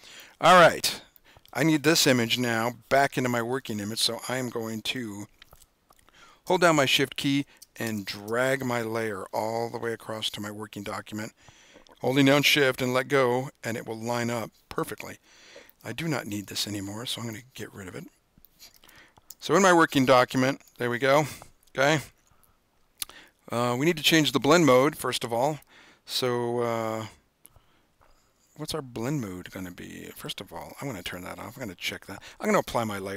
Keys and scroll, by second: 19.5 super+=.